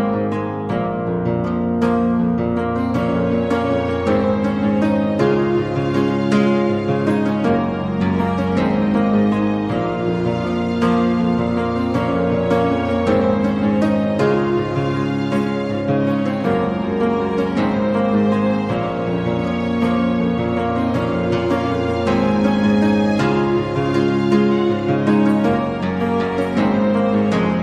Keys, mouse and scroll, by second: 0.0 2, 0.0 g, 0.1 shift+middle click, 0.4 middle click, 6.2 middle click, 8.5 Tab, 9.0-10.1 middle drag, 10.2 a, 10.3 a, 10.5 middle click, 11.3 click, 11.5 Tab, 14.7 Tab, 15.1 middle click, 16.1 middle click, 16.5 Tab, 18.0 g, 19.8-21.2 middle drag, 22.2 Tab, 22.6 a, 22.9 middle click, 23.1 shift+middle click, 24.9 click, 25.3 Tab, 25.5 a, 25.7 a, 26.5 ctrl+r.